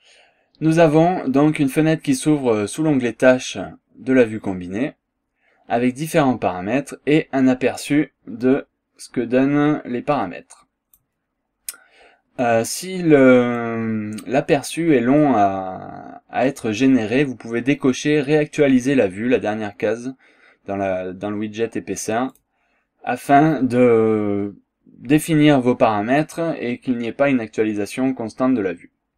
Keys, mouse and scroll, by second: 8.4-11.2 drag, 12.7 scroll down 1, 13.0 scroll up 1, 13.6 click, 15.8 scroll up 1, 16.1-16.4 scroll down 1, 22.3 click, 23.4 scroll down 1, 23.7 scroll up 1.